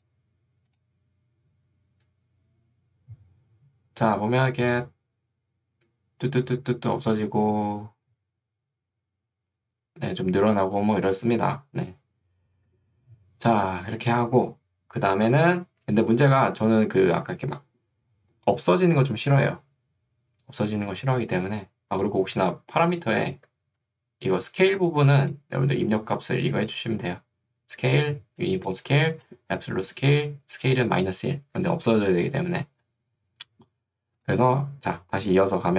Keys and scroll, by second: 23.4 ctrl+2, 31.6 Escape.